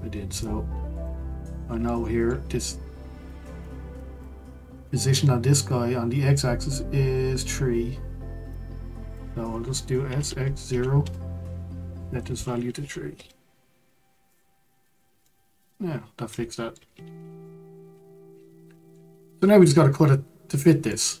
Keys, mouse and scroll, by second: 0.4 click, 1.4-1.9 scroll up 2, 1.9-3.2 shift+middle drag, 3.2 click, 3.9 click, 8.5 click, 10.0 s, 12.1-13.9 drag, 13.9-14.3 scroll down 2, 14.3 click, 14.9-15.2 scroll down 2, 15.2-20.4 middle drag, 20.9-21.2 middle drag.